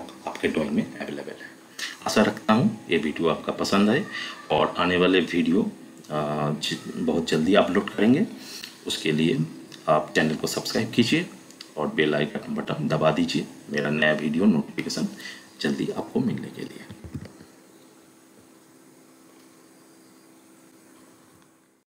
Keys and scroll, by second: 17.0 F11.